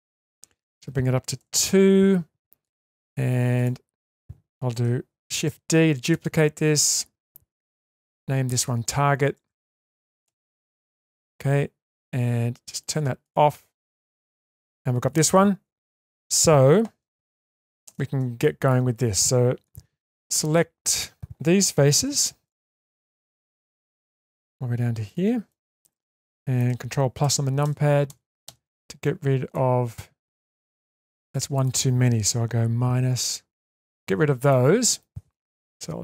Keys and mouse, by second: 0.6 click, 2.6 click, 5.5 shift+d, 7.9 click, 8.1-11.1 drag, 13.7 click, 14.3 click, 17.8 shift+space, 18.4 middle click, 19.7 Tab, 20.0-21.2 middle drag, 22.0 3, 23.1 middle click, 23.7 shift+middle click, 25.5 middle click, 26.0 shift+middle click, 29.5 middle click, 31.1 middle click, 34.5 middle click.